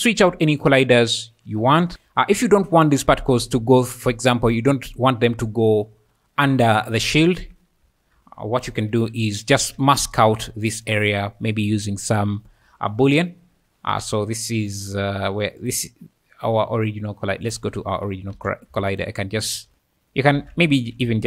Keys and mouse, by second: 2.8 `, 2.8 `, 5.9 `, 7.2 `, 7.8 `, 8.9 KP_7, 9.6 alt+a, 10.7 click, 15.6 click, 17.6 click, 18.3 alt+a, 18.9 shift+click, 19.4 alt+a, 19.7 Tab, 20.4 alt+a, 20.9 z.